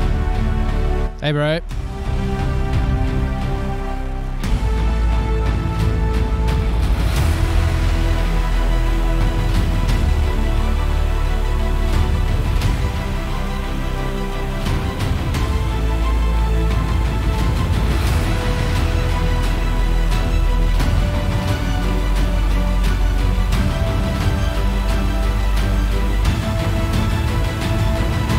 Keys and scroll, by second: 7.5 super+-, 7.6 super+=, 24.7 super+=.